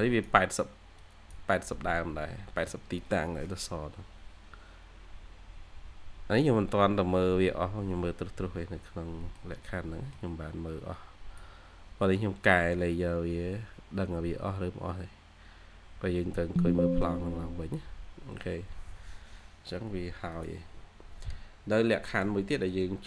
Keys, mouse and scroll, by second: 9.0 scroll down 1, 9.1 middle click, 21.3 scroll up 1, 22.1 middle click, 23.0 middle click.